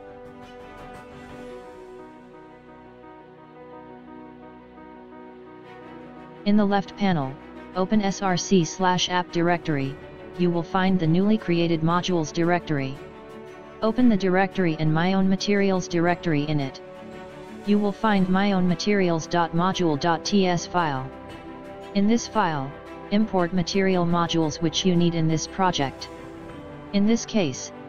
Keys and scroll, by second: 16.9 space, 19.7 space.